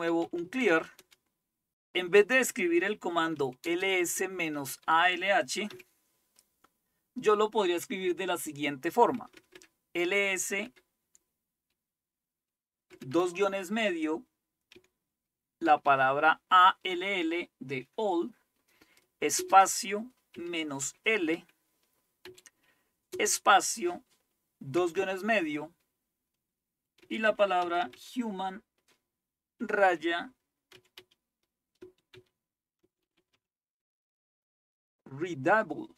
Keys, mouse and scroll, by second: 0.0-1.2 typing, 3.0-5.7 typing, 9.2 BackSpace, 9.4 BackSpace, 9.6 BackSpace, 10.7 BackSpace, 13.0 typing, 14.8-15.9 typing, 19.4-20.4 typing, 22.3-23.1 typing, 24.8 typing, 26.9-28.4 typing, 29.6 typing, 30.7-33.9 typing.